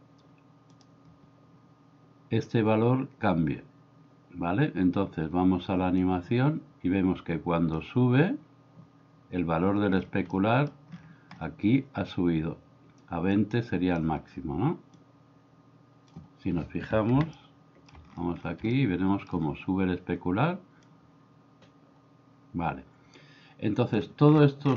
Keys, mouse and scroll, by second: 6.1-7.8 drag, 10.5 middle click, 13.3 click, 15.0-16.1 drag, 17.4-17.9 shift+middle drag, 18.8-19.4 shift+middle drag, 20.9-24.0 drag.